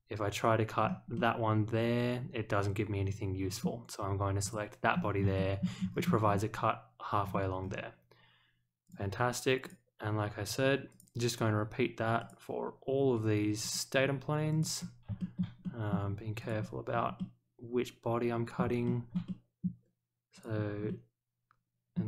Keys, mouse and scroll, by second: 0.8 scroll up 2, 1.1-3.6 middle drag, 4.4 click, 4.9 scroll down 2, 5.3 shift+middle click, 5.9-6.3 scroll down 1, 7.2-7.8 scroll up 2, 8.8 click, 9.6 click, 10.9 click, 12.2 click, 13.6 click, 14.5 click, 15.1 shift+middle click, 15.6 middle drag, 16.4 click, 16.9 scroll down 1, 17.1-18.5 middle drag, 18.8 shift+middle drag, 19.2-19.6 middle drag, 20.3 click, 20.8-21.9 middle drag.